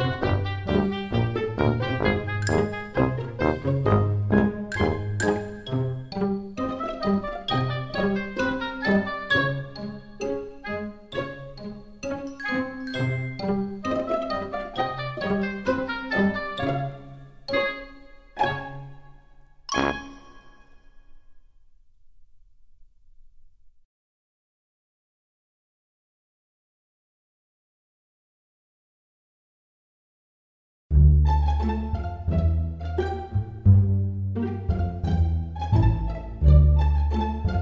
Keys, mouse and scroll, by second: 0.6-1.1 scroll down 2, 2.4-2.8 scroll down 1, 2.8 middle click, 3.6 r, 9.4 s, 17.4 super+z, 17.9 middle click, 20.7 super+z, 21.2 middle click, 23.0 r, 28.3 s, 36.4 super+z, 37.0 e.